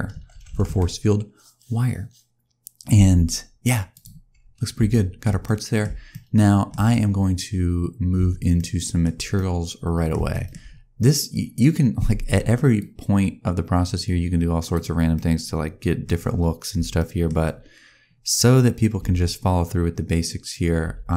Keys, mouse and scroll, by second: 3.8 click, 4.5 scroll down 1, 4.8 shift+middle click, 5.3 middle click, 6.0 shift+middle click, 8.4 shift+middle click, 10.2 shift+middle click, 12.7 click, 14.9 scroll down 1, 15.0 middle click, 16.8 shift+middle click, 20.7 n.